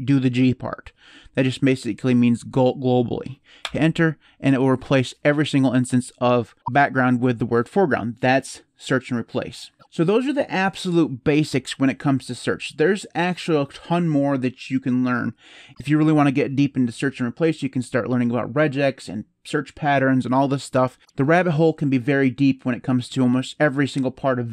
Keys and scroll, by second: 3.4 Return.